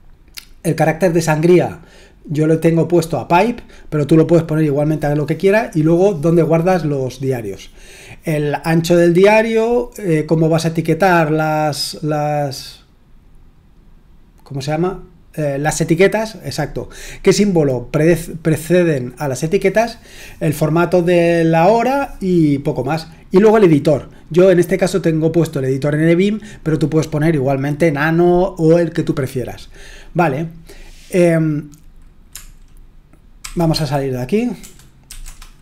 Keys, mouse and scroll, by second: 33.4-35.2 typing.